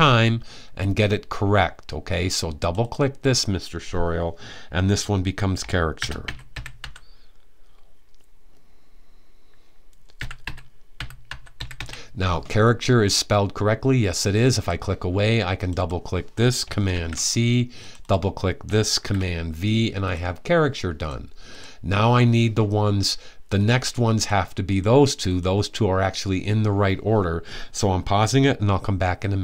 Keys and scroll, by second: 5.4-6.9 typing, 9.8-11.9 typing, 16.6 super+c, 18.6 super+v.